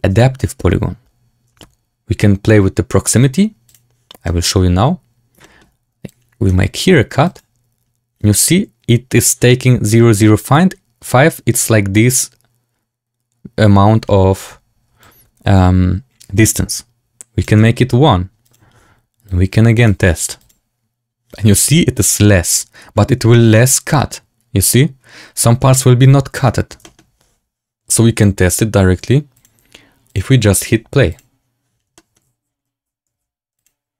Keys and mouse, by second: 3.8 click, 4.1 shift+click, 5.3 shift+click, 6.0 click, 15.1 shift+click, 18.5 click, 20.3 click, 22.9 middle drag, 23.2 shift+middle click, 26.7 shift+middle drag, 29.3-30.6 drag, 32.0 shift+middle click, 33.1 w.